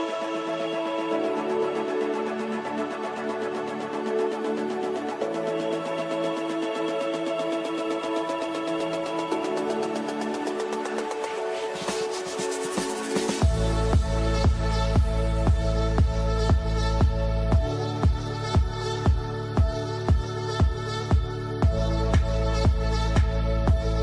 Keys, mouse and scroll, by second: 3.6-5.2 right drag, 5.2-9.0 alt+drag, 9.0-13.6 shift+drag, 13.6-15.8 drag, 15.8-24.0 drag.